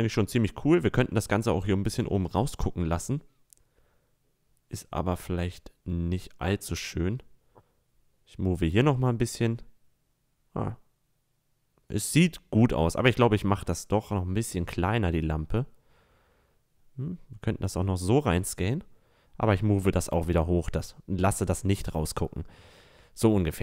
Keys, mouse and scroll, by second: 1.7-3.6 middle drag, 3.6-6.7 drag, 9.0-9.7 middle drag, 10.9 a, 11.5 click, 11.7 middle click, 13.0 right drag, 13.3 s, 15.1 s, 19.3 click, 20.9 a, 21.1-22.1 middle drag, 22.6-23.6 drag.